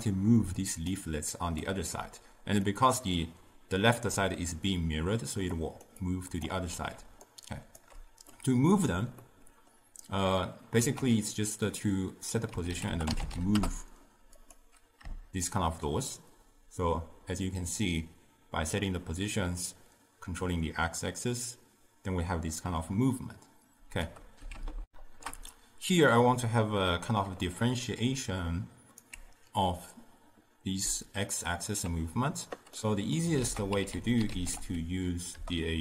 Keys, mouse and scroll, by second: 0.4 d, 0.7 click, 1.0 d, 1.2-1.7 drag, 1.7-2.0 d, 2.7-5.4 middle drag, 5.4-8.3 typing, 5.6 click, 6.1-6.5 drag, 7.3 right click, 8.4-10.9 middle drag, 10.9 ctrl+a, 15.6-18.6 shift+drag, 24.9 ctrl+alt+shift+q, 28.1 d, 28.3 right click, 29.1 d, 29.2 d, 32.8 middle click, 33.5 ctrl+a.